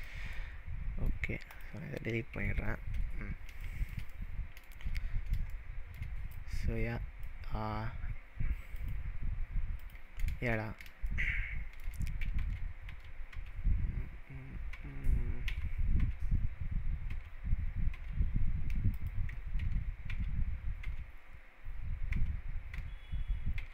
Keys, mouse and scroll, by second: 0.0 click, 0.4-1.2 middle drag, 1.6 click, 2.4 Delete, 3.1-3.5 scroll up 3, 3.6-4.7 shift+middle drag, 5.1 scroll down 2, 5.6-6.1 shift+middle drag, 6.6-7.2 drag, 8.8 click, 9.8 click, 10.6-11.1 scroll down 4, 11.1-11.9 shift+middle drag, 12.3 ctrl+z, 14.2 ctrl+z, 15.1 ctrl+z, 15.6 ctrl+z, 17.2 ctrl+z, 17.3 ctrl+z, 18.9 ctrl+z, 19.0 click, 19.6 ctrl+z, 21.4 ctrl+z, 22.2 ctrl+z, 23.1 ctrl+z.